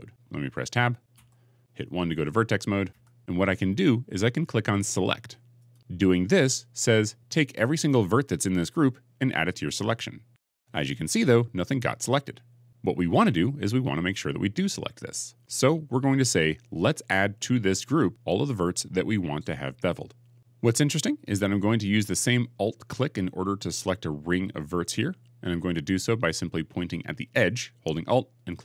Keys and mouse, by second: 0.0 middle click, 1.0 Tab, 2.8 1, 2.8 2, 3.2 1, 5.1 middle click, 5.5 click, 5.6-10.9 middle drag.